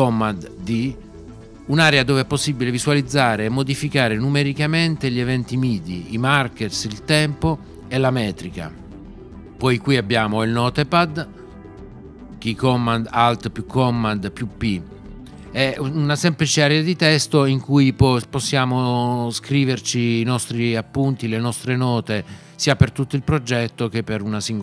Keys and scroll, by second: 0.2 d, 13.1 alt+super+p.